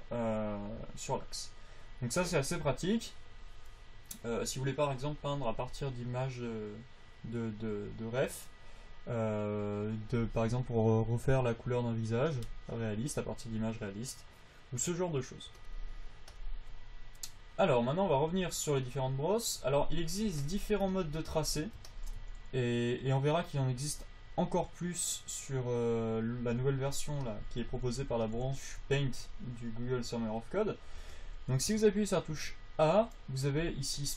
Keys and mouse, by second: 0.7 click, 1.5-3.6 drag, 4.3-10.7 drag, 10.7-12.1 middle drag, 20.2 f, 27.2 f, 28.0 click, 28.3 f, 29.5-31.7 drag.